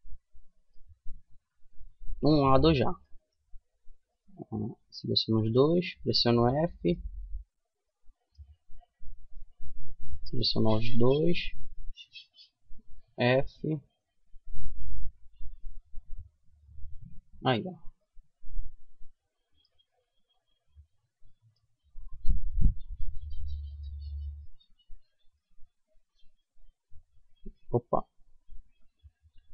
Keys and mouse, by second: 0.5-2.5 middle drag, 2.5 a, 3.4-5.0 drag, 5.0 right click, 5.0 f, 5.6 middle click, 10.6-12.4 middle drag, 12.4 f, 12.8-14.2 middle drag, 16.2 Tab, 17.8 middle click, 18.3-19.3 middle drag, 19.5-21.1 middle drag, 21.1 Tab, 21.9-24.4 middle drag, 26.7-27.9 middle drag, 28.0 middle click, 28.9 KP_Decimal.